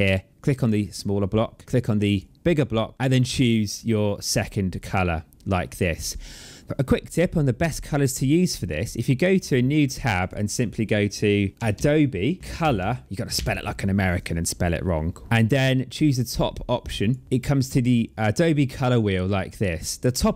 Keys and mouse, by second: 0.3 click, 1.9 click, 2.9 click, 4.6 click, 8.6 click, 9.9 click, 11.5-13.1 typing, 15.2 Return, 15.2 KP_Enter, 16.8 click.